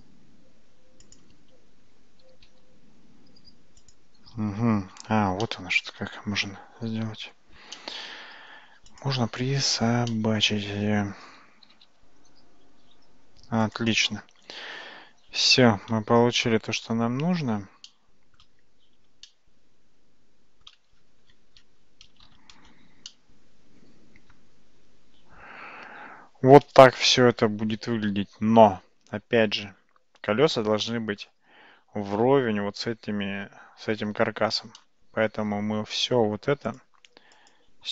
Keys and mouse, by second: 1.1 click, 2.2 g, 5.5 shift+middle click, 7.8 shift+middle click, 9.0 click, 10.1 shift+middle click, 11.7 g, 15.5-15.9 shift+middle drag, 17.9-18.4 shift+middle drag, 19.3-20.7 shift+middle drag, 22.4 shift+z, 23.1-31.2 middle drag, 34.8-35.4 middle drag, 36.7 shift+click.